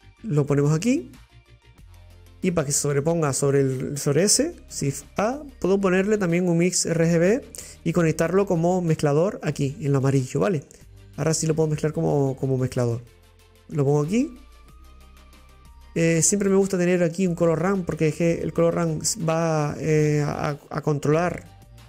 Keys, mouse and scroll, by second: 3.0 click, 11.5 click, 15.5 middle click, 16.2 click, 17.0 click.